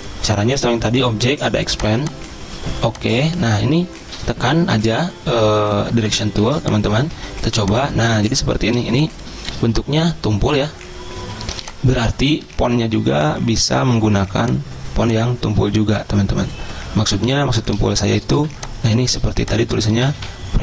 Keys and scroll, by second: 4.3 a, 6.3-9.9 typing, 12.6 a, 17.5 z, 18.6 v, 20.0-20.6 typing.